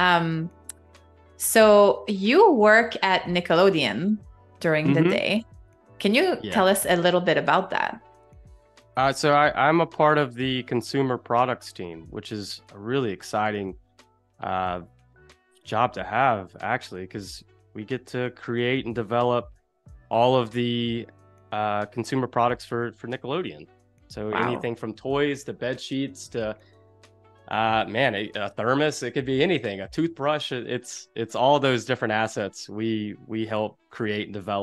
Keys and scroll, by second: 4.3 z, 5.1 space, 5.9 v.